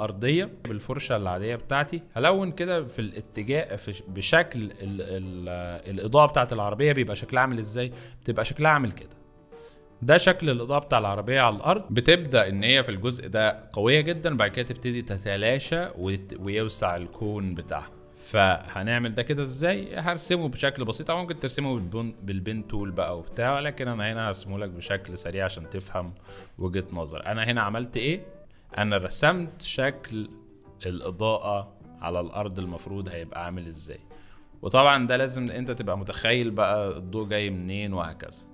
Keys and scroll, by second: 2.7 ctrl+z, 6.7 F3, 18.7 Escape, 34.0 z, 35.4 space, 36.4 z.